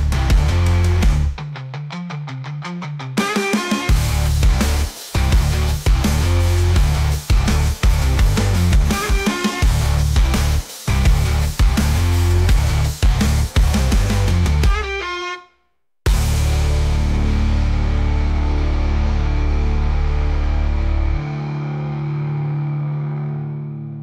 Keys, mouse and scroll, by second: 0.5-1.0 scroll down 2, 1.0 ctrl+s, 1.2 scroll down 3, 1.5-2.0 middle drag, 2.0 click, 2.4 scroll up 1, 2.6-3.4 shift+middle drag, 3.4-4.2 scroll up 1, 4.2 click, 5.1 click, 15.6-17.1 middle drag, 23.5 click.